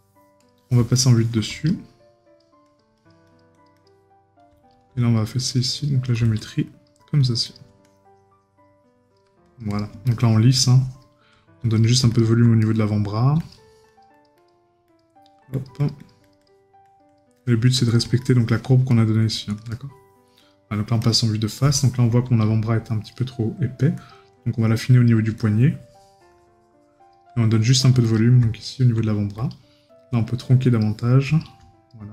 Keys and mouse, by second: 0.9 right click, 12.6 right click, 18.9 right click, 21.7 right click.